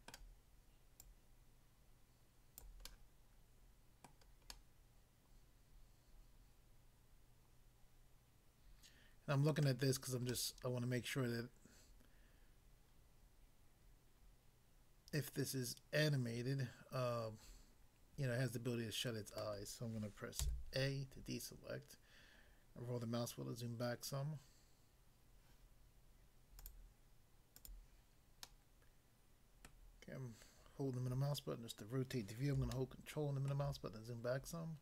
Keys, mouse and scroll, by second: 0.1 middle click, 1.0 click, 2.7 click, 2.9 middle click, 4.1 middle click, 4.6 middle click, 9.5 middle click, 10.3 middle click, 19.5 middle click, 20.5 a, 21.2 scroll down 1, 26.7 click, 26.7 click, 27.6 click, 27.9 click, 28.4 middle click, 29.7 middle click, 32.7 ctrl+middle click.